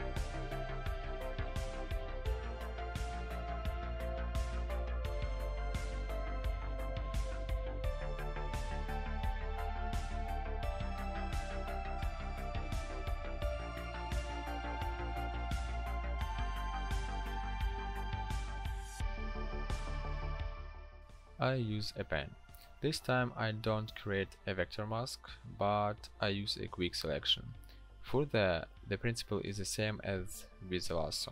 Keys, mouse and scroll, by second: 0.7 p, 24.1 right click.